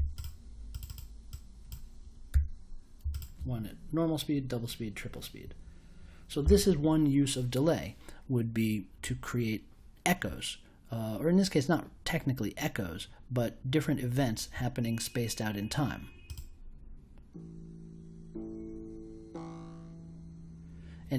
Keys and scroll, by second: 2.3 3.